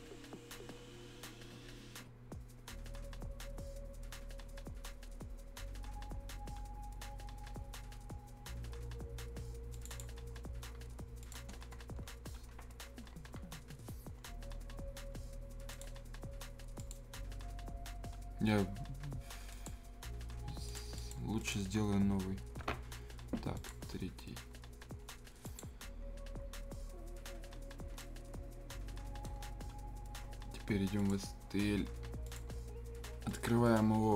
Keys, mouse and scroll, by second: 0.3-2.0 scroll up 1, 2.0-3.1 scroll down 1, 9.7 click, 10.6-11.2 scroll down 1, 11.2 click, 11.5-12.0 scroll down 1, 12.0-13.3 scroll up 1, 14.1-15.7 scroll down 1, 15.7 click, 19.5 click, 28.0-31.0 right drag, 31.0-34.1 drag.